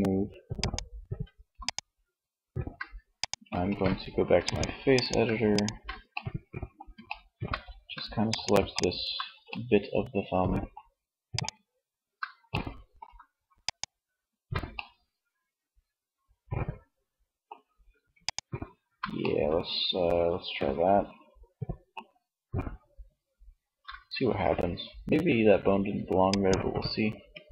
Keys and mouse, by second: 2.6 ctrl+Tab, 8.7 middle click, 9.0 middle click, 11.6 right click, 26.4 Tab.